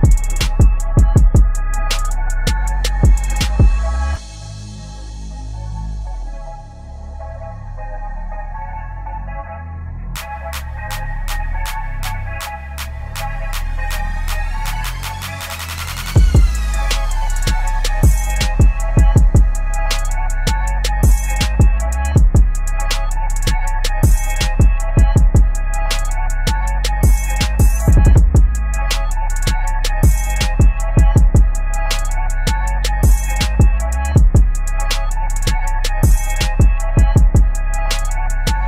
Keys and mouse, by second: 0.0-4.6 drag, 5.4 ctrl+t, 7.6-12.1 alt+shift+drag, 12.6-13.8 typing, 14.7 click, 15.3 ctrl+t, 16.3-22.3 alt+shift+drag, 22.3 ctrl+a, 23.2 click, 23.5 ctrl+d, 24.8 shift+Down, 27.6 u, 28.9 right click, 29.9 click, 33.7 Tab, 36.1 click, 38.1 v.